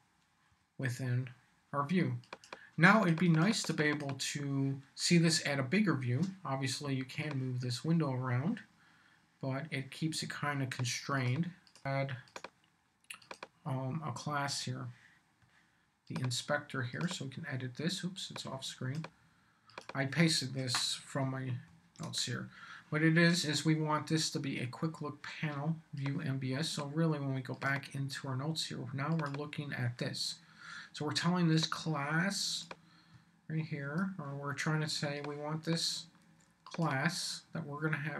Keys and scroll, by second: 21.6 super+v.